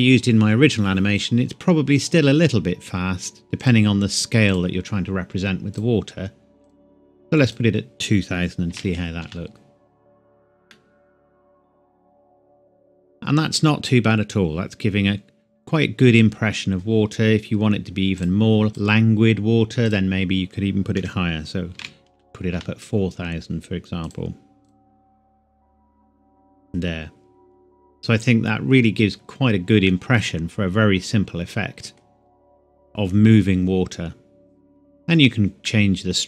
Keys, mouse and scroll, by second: 3.6 click, 8.7 BackSpace, 9.2 Return, 9.5 click, 10.1 click, 10.7 middle click, 12.1-12.8 scroll up 1, 12.8 scroll up 1, 18.1 click, 20.9 Left, 21.7 BackSpace, 21.8 4, 22.5 Return, 24.0 click, 29.6 scroll down 1, 29.9 middle click, 29.9 scroll up 1, 32.0 scroll down 1, 35.6 middle click, 36.1 scroll up 1.